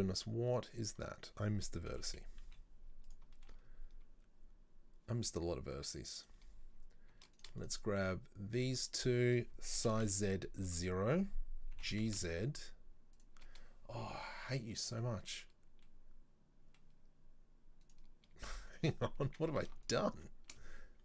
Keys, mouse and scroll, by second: 0.6 right click, 2.0 KP_3, 2.5 z, 3.4 shift+middle click, 3.7-6.3 scroll up 2, 6.3 right click, 7.4 right click, 7.7 shift+right click, 8.6 shift+right click, 8.9 shift+right click, 9.8 s, 14.3-17.9 middle drag, 17.9 right click, 18.8 shift+right click, 19.9 alt+shift+right click.